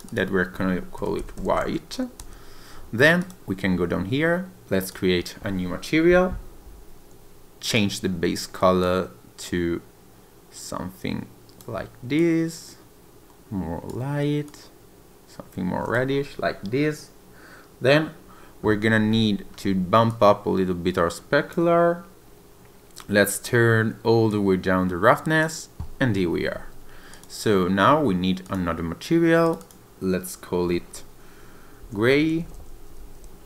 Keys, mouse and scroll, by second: 0.1 click, 3.2 click, 6.3 click, 19.1-20.1 scroll down 2, 20.1 click, 22.9-24.3 scroll down 2, 24.3 click, 27.1 click, 28.4 click, 29.4 click, 29.6 click.